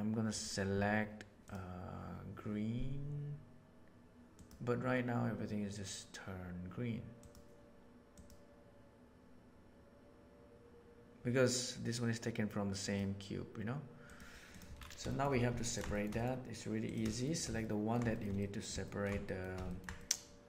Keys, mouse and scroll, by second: 0.3 click, 15.0 shift+middle click, 15.6 ctrl+middle drag, 15.8 shift+middle drag, 16.1 middle drag, 16.8 click, 17.2 shift+middle click, 17.6 ctrl+middle drag, 18.0 shift+middle click, 18.3 middle click, 18.8-19.4 ctrl+shift+middle drag, 19.6 ctrl+middle click, 19.9-20.4 middle drag.